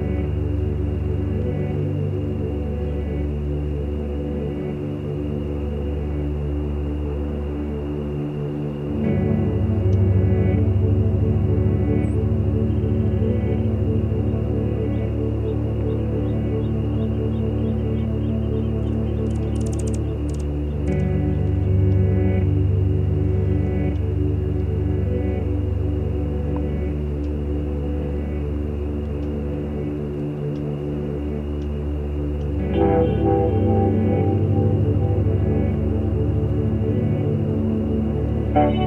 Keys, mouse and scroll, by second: 0.4 shift+click, 1.1 shift+click, 1.6 shift+click, 2.7 shift+click, 3.0 shift+click, 3.8 shift+click, 4.8 shift+click, 6.4 shift+click, 7.1 shift+click, 7.4 shift+click, 9.1 shift+click, 9.5 shift+click, 10.1 shift+middle click, 11.4 click, 12.7 click, 13.6 click, 14.6-17.7 drag, 18.4 shift+click, 19.4 click, 20.4 click, 21.9-23.2 drag, 24.9 click, 27.2 ctrl+z, 27.7-28.8 ctrl+drag, 30.1 click, 33.2 shift+click, 34.5 click, 36.0 click, 36.8 click, 37.2 click, 38.6 click.